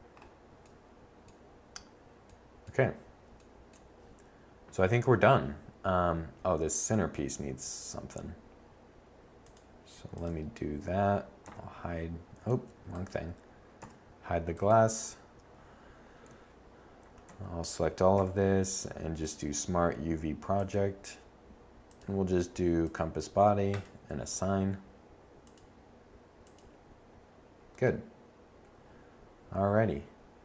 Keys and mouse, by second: 6.3 middle click, 11.4 h, 12.5 z, 13.7 h, 16.2 Tab, 16.9 a, 17.2 a, 18.0 u, 24.2 Tab, 27.2 middle click.